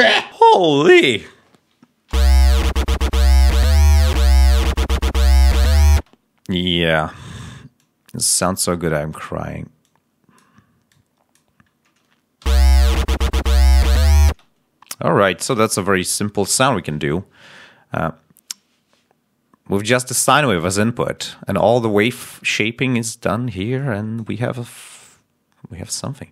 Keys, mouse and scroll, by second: 2.0 l, 5.9 space, 7.7 click, 8.2 click, 12.3 l, 14.2 space, 15.2-16.8 drag, 23.7 click, 25.9 click.